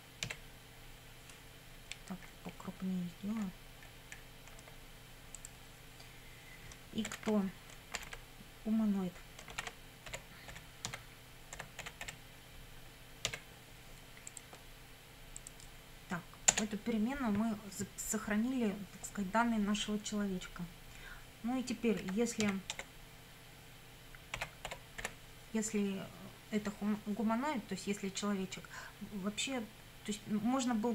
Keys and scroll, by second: 1.1 d, 7.1 shift+9, 8.0 shift+', 9.5-13.3 typing, 16.5 Return, 22.0 i, 22.4 f, 22.8 space, 24.1-25.5 typing.